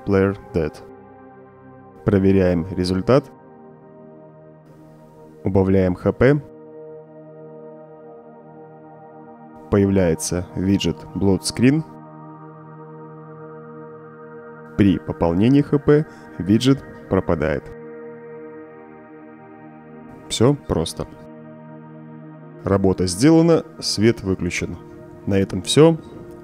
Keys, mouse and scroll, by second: 0.5 click, 1.3 click, 3.1 click, 6.7-10.9 typing, 15.5 0, 16.2 0, 17.1 0, 18.4 0, 22.3 0.